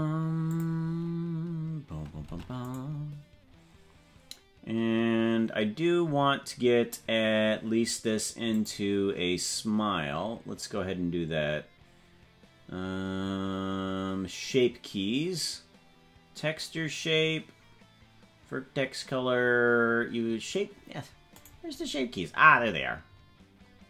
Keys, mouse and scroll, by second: 0.5 click, 2.3 ctrl+Tab, 2.7 right click, 8.5 click, 21.4 right click.